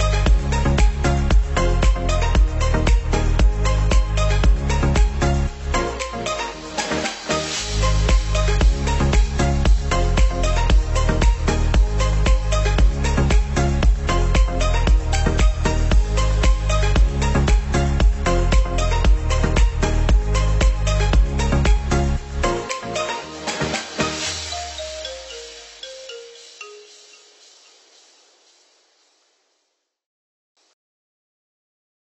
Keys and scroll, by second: 14.5 ctrl+z, 18.0 ctrl+z, 22.4 Delete, 29.0 ctrl+z.